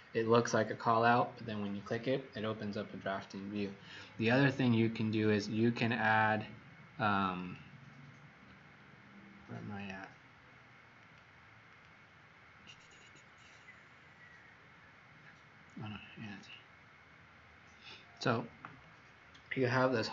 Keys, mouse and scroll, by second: 7.4 click, 11.6 click, 16.3 click.